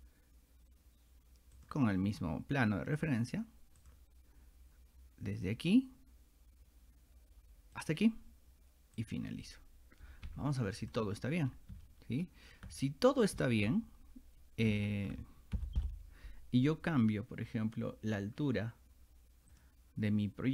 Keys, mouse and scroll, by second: 1.6 click, 3.0 click, 3.8 click, 5.4 click, 7.8 click, 9.0 click, 10.8 click, 11.5 scroll down 2, 11.8 shift+middle click, 12.8-13.2 scroll up 4, 14.7 shift+middle click, 15.6 h, 19.5 click.